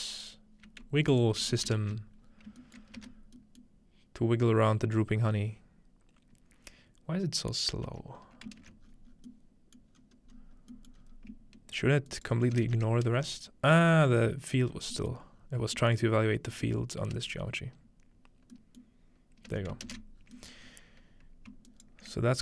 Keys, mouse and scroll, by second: 1.1-2.6 alt+shift+drag, 1.1-1.6 scroll up 1, 1.8 ctrl+space, 2.3-2.8 scroll down 1, 2.6-3.4 shift+middle drag, 3.0 shift+space, 3.4 scroll down 1, 3.6-5.5 middle drag, 7.8 space, 8.6 ctrl+space, 8.8-9.9 scroll down 1, 9.9-11.6 scroll up 1, 10.9-12.1 middle drag, 12.1-13.2 ctrl+right drag, 15.2-17.1 middle drag, 15.3-16.5 scroll down 1, 16.5-17.1 scroll down 1, 17.1 space, 18.5 middle drag, 19.5 space, 20.2-20.6 scroll down 2, 20.6-21.2 scroll up 4, 21.3-22.4 ctrl+middle drag, 21.7 right click.